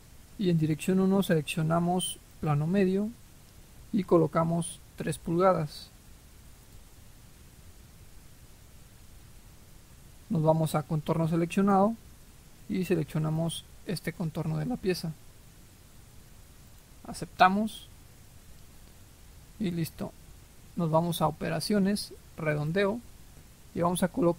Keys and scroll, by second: 6.0 3.